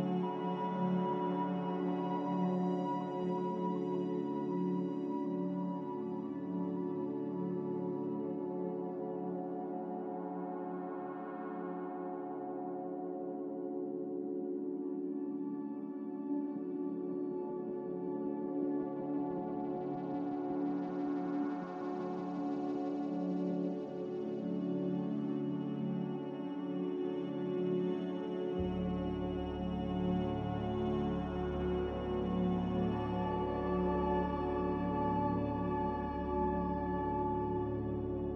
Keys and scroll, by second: 20.6 c, 21.1 z, 29.0 a, 35.0-35.9 typing.